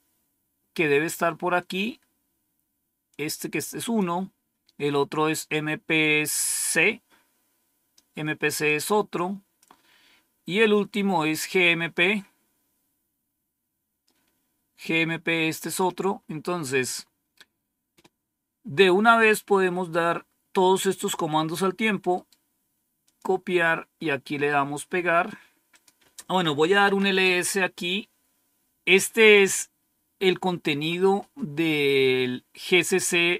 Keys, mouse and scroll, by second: 0.7-1.5 scroll up 2, 3.0-4.2 drag, 8.6-9.7 drag, 11.5-12.0 scroll up 2, 13.2-13.5 scroll up 2, 14.7-16.1 drag, 16.4-17.6 scroll down 5, 19.2-21.1 drag, 22.1 right click, 23.0 click, 25.6 click, 26.4-27.4 typing.